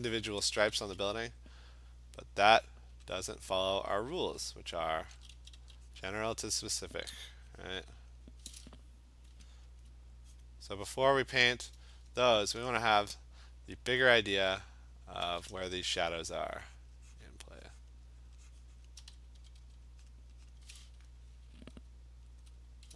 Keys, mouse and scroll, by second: 0.0 click, 0.6 [, 0.8 [, 3.2 click, 3.7 click, 4.0 click, 4.3 click, 4.5 click, 5.1 [, 5.3 [, 5.6 [, 6.0 click, 6.2 click, 7.7 click, 9.8 alt+click, 9.9 alt+click, 10.4 click, 11.0 click, 11.4 click, 11.4 alt+click, 15.2 [, 15.5 [, 16.4 click, 16.5 click, 16.8 click, 17.2 click, 17.9 click, 18.3 click, 18.8 click, 19.0 ], 19.4 ], 19.6 ], 20.1 click, 20.6 click, 22.4 alt+click.